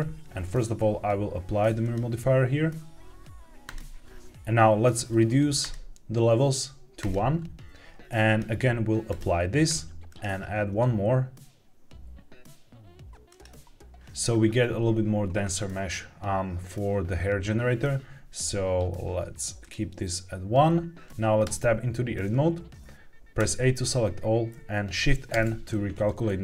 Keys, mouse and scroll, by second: 1.7-3.7 drag, 4.2 Tab, 5.5 click, 6.9 click, 8.2-9.1 drag, 10.0-13.4 drag, 19.5 click, 21.4 Tab, 23.3 a, 25.2 shift+n.